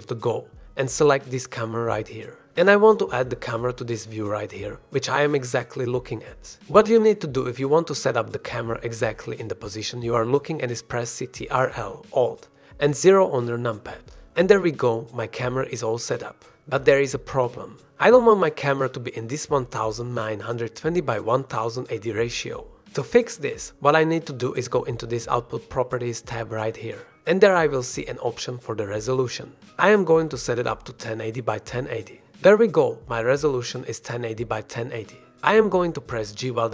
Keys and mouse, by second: 0.9 shift+a, 4.6 middle click, 5.2 middle click, 5.7 shift+drag, 6.4 middle click, 7.3 shift+click, 13.0 ctrl+alt+KP_0, 23.8 middle click, 28.6 middle click, 29.9-31.3 drag, 32.0-33.4 drag.